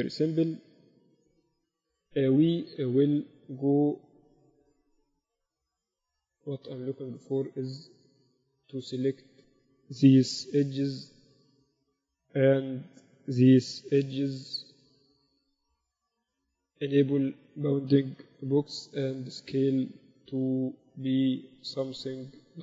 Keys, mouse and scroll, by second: 1.1 KP_1, 1.6 z, 5.9 Tab, 7.6-9.3 drag, 7.8 a, 8.3-9.3 right drag, 8.8 a, 9.5-11.1 right drag, 10.4 a, 11.1 b, 14.6 b, 17.5-19.2 drag, 18.9 s.